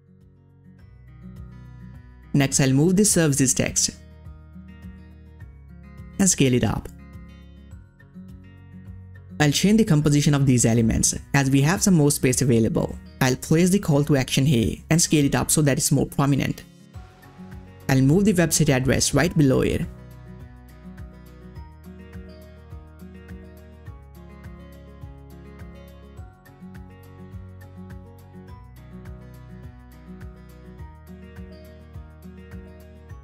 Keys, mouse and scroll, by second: 0.2-0.5 ctrl+scroll up 1, 0.6 space, 0.8 click, 0.9 space, 2.3-7.8 drag, 7.8 click, 8.2-9.2 scroll down 1, 11.4 scroll down 1, 11.4-18.4 drag, 18.4-23.7 drag, 23.7 ctrl+scroll up 1, 25.3-33.2 drag.